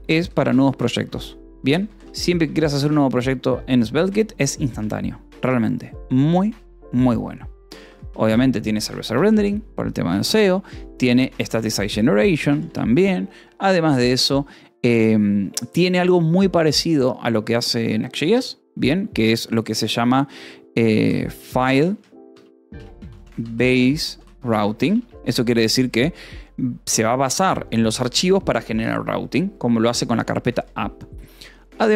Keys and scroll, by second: 0.0-2.5 typing, 3.3 ctrl+s, 3.9 o, 4.6 :, 4.7 space, 8.1 Escape, 8.5 o, 9.1 :, 9.3 space, 11.7 Escape, 12.0 o, 12.4 :, 12.6 space, 20.9-25.2 typing, 25.7 ctrl+s, 30.6 o.